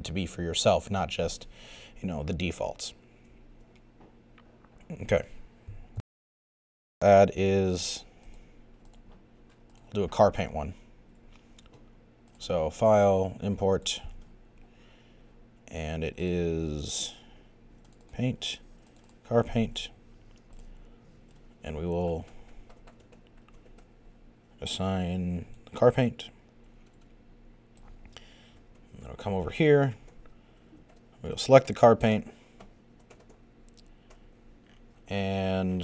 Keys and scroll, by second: 6.0 super+..